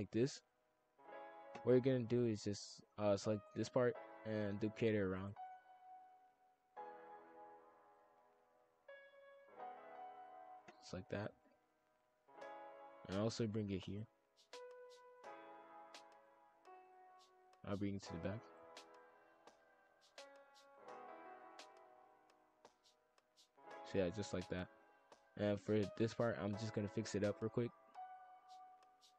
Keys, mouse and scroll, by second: 0.1-1.8 middle drag, 1.8 click, 2.5 shift+click, 2.9 g, 4.0 KP_5, 4.1 KP_1, 5.1 shift+d, 5.8-8.4 drag, 8.4 a, 9.3 click, 11.9-13.8 middle drag, 13.8-14.6 drag, 14.6 middle click, 15.4 shift+click, 16.0 shift+click, 16.7 shift+d, 17.5-18.6 drag, 20.5 click, 20.9-22.2 middle drag, 22.2-23.2 scroll up 1, 23.3 scroll down 4, 23.5-24.7 middle drag, 24.7-25.1 scroll up 2, 25.1 click, 26.7 click, 27.1-29.1 drag.